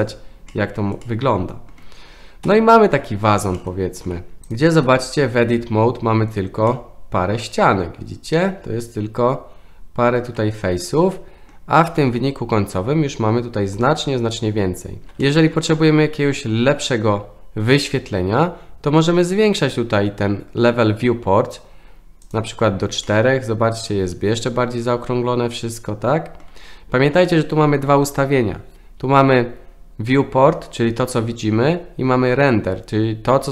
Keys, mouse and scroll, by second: 0.5 middle drag, 1.0-1.7 middle drag, 2.5 KP_1, 3.6 shift+middle click, 4.5 click, 4.8 Tab, 6.7-11.5 middle drag, 12.1 Tab, 15.2 shift+middle drag, 15.7-16.5 middle drag, 22.2 click, 23.0-26.4 middle drag.